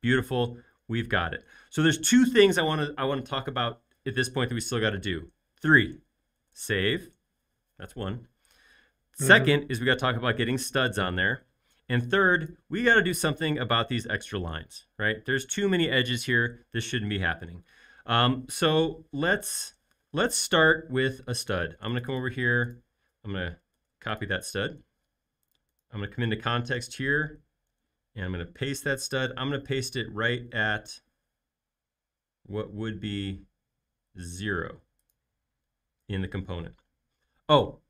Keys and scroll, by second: 6.4 super+s, 23.7 super+c, 27.7 super+v, 36.0 space.